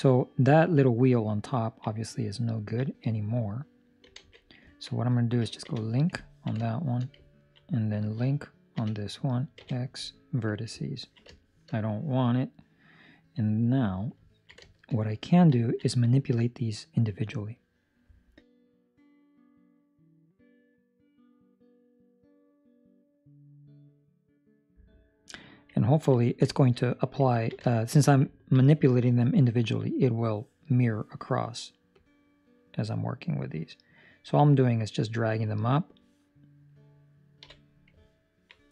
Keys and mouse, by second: 1.6 ctrl+middle click, 1.8 middle click, 2.5 ctrl+middle click, 2.8 middle click, 4.1 alt+a, 4.7 ctrl+middle click, 5.6 l, 6.2 ctrl+middle click, 6.6 shift+middle click, 7.2 ctrl+middle click, 8.7 l, 10.8 ctrl+middle click, 11.3 shift+middle click, 11.7 middle click, 13.4 middle click, 14.3 ctrl+middle click, 14.8 shift+middle click, 15.0 shift+middle click, 15.7 ctrl+middle click, 15.8 middle click, 16.5 middle click, 19.1 middle click, 21.2 alt+right click, 22.3 alt+shift+right click, 22.9 ctrl+middle click, 23.4 shift+middle click, 25.7 ctrl+middle click, 26.4 shift+middle click, 26.8 middle click, 27.3 ctrl+middle click, 27.6 shift+middle click, 27.9 middle click, 28.4 ctrl+middle click, 28.5 middle click, 31.9 click, 37.3 KP_3, 38.0 ctrl+middle click.